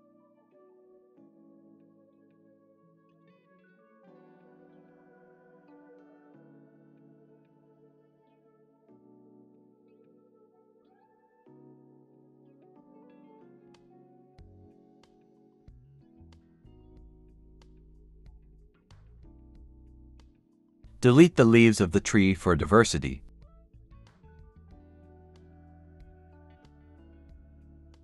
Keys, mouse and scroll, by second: 0.5 typing, 1.2 middle click, 2.4-2.7 scroll up 1, 2.7-5.6 typing, 3.4 scroll down 1, 3.5 middle click, 5.6 double click, 5.8 shift+click, 6.1-6.5 scroll down 1, 6.7-21.4 typing, 7.6-8.0 scroll, 8.0 scroll down 1, 8.9 shift+click, 10.4 scroll up 1, 12.1-12.4 scroll up 1, 15.8 scroll down 1, 15.9 middle click, 20.8 scroll up 1, 22.6 Escape, 22.7 Tab, 24.2 scroll up 1, 25.6 Delete, 26.5 Tab, 26.8 KP_0, 27.8 Escape.